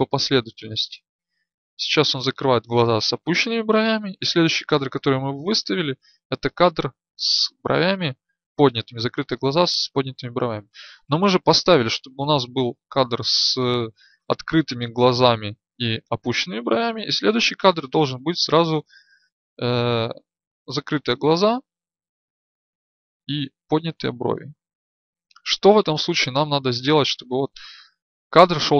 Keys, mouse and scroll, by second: 0.2 Right, 0.6 Right, 1.0-1.6 Right, 1.9 Right, 4.3 Right, 4.4 Right, 4.8 Right, 6.2 Right, 7.0 Right, 12.2-14.3 Left, 18.5-21.4 drag, 21.4-22.4 Left, 23.2-23.9 Right, 24.2 Right.